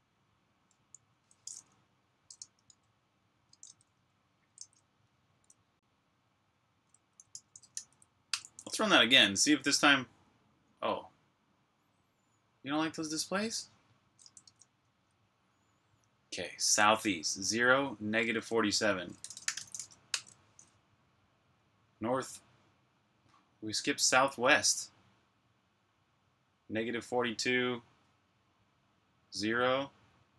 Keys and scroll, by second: 1.0 ⟳, 2.3-2.7 typing, 3.8 super+Tab, 4.5 super+q, 6.9-8.2 typing, 14.3 super+Tab, 18.9-20.5 typing, 29.6 Up.